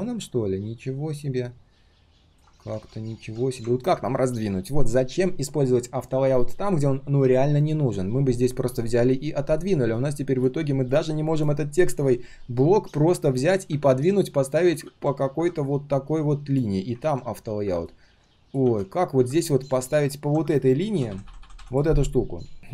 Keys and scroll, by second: 2.7 ctrl+z, 14.8 ctrl+z, 17.0 ctrl+z, 18.6 ctrl+z.